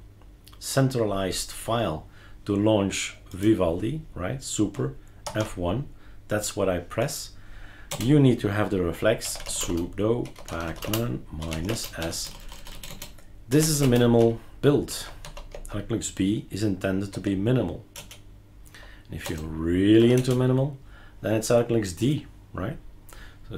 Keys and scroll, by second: 5.2 super+F1, 7.9 BackSpace, 9.0-15.7 typing, 17.1 Tab, 17.9 Return, 18.5-20.0 typing, 20.1 Return.